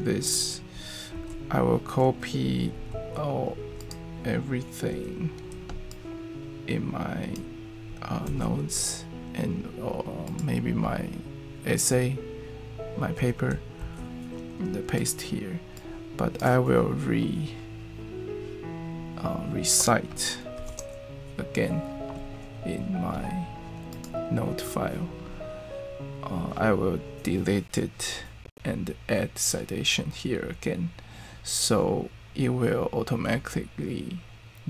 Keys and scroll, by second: 1.1 super+x, 2.9 super+z, 8.2 super+x, 13.8 super+v, 20.6 ctrl+alt+Return.